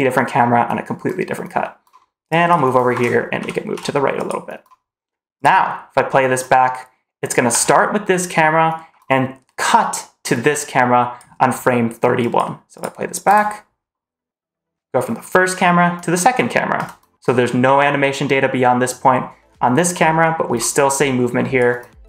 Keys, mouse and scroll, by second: 2.2 click, 2.8 shift+`, 5.2 click, 7.4 click, 10.2 click, 12.1 drag, 12.6 click, 13.1 space, 16.6 space, 20.8 click.